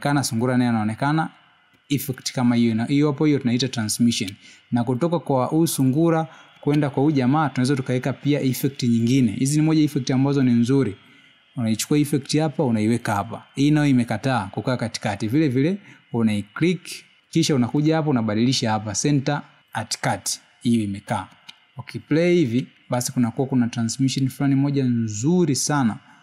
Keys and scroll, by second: 1.2 space, 5.5 space, 7.8 space, 10.2 space, 24.9 space.